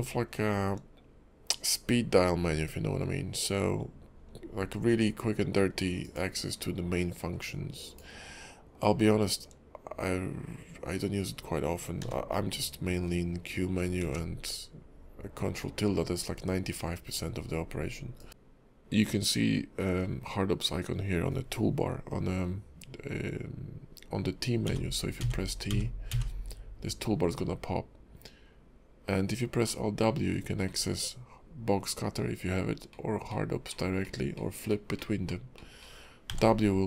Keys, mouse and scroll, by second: 12.0 q, 14.0 ctrl+`, 24.6 t, 25.2 t, 25.7 t, 26.1 t, 29.6 alt+w, 30.7 alt+w, 32.9 alt+w, 33.3 alt+w, 33.7 alt+w, 34.0 alt+w, 34.3 alt+w, 34.7 alt+w, 35.0 alt+w, 35.2 alt+w, 35.5 alt+w, 35.8 alt+w.